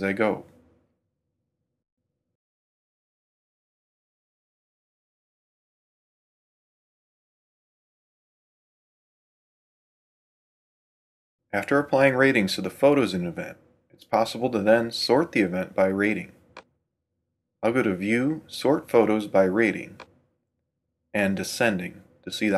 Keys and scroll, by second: 0.5 super+4, 0.6 super+Right, 1.9 super+3, 2.3 super+Right, 3.1 Right, 3.7 Right, 4.4 Right, 5.0 super+4, 5.3 super+Right, 6.4 super+3, 6.7 super+Right, 8.0 super+4, 8.1 super+Right, 9.1 Right, 9.9 Left, 10.9 super+2.